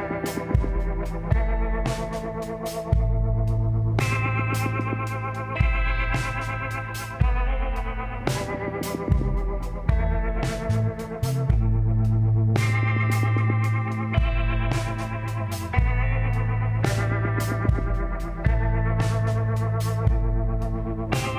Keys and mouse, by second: 3.8 s, 5.7-7.3 drag, 7.3 middle click, 7.8 click, 7.8 z, 8.9 z, 11.2 m, 14.1 click, 14.7-15.8 drag, 15.9 KP_7, 18.9 r.